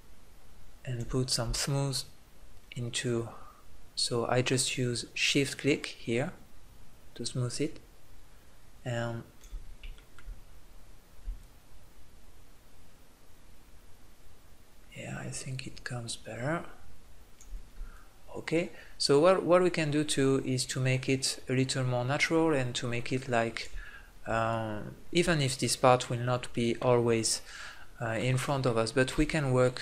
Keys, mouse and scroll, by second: 1.2 middle click, 1.7-6.1 drag, 11.4-17.6 drag, 18.0-22.1 drag, 24.5-26.3 drag, 29.4-29.8 drag.